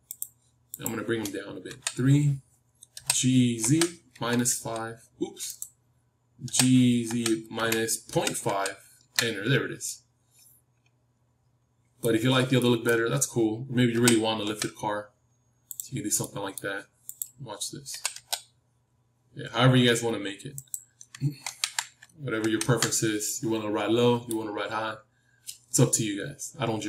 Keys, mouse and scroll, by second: 1.6 KP_3, 2.8 g, 6.4 g, 9.8-11.8 middle drag, 12.5-15.2 middle drag, 13.8 g, 15.8-17.4 middle drag, 17.4-19.0 drag, 17.8 g, 21.4 ctrl+z, 22.4 ctrl+z, 23.2-26.8 middle drag.